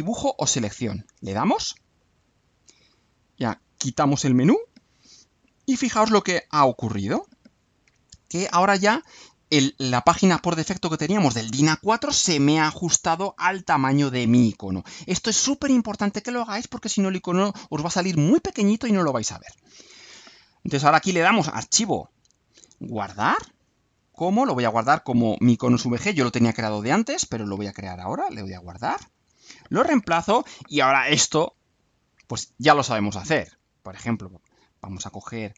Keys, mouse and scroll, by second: 2.0 click, 4.7 click, 6.7 click, 8.3 click, 20.7 click, 22.5 click, 25.1 click, 26.9-27.5 alt+drag, 28.1 click, 29.0 click, 31.7 click, 34.3 click.